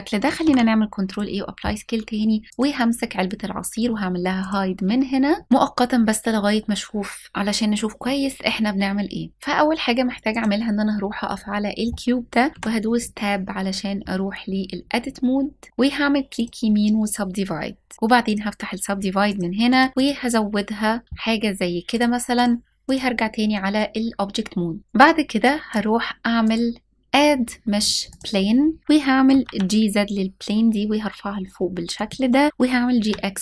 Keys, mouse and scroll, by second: 0.0 ctrl+a, 2.4-4.1 drag, 5.4-7.1 scroll up 1, 9.9 click, 12.4 Tab, 15.7 right click, 17.9 middle click, 17.9 click, 18.9 click, 19.3 click, 21.6-22.1 drag, 22.5 click, 24.6 click, 26.1-27.8 drag, 28.9 g, 29.0 z, 31.6 click, 32.5 g.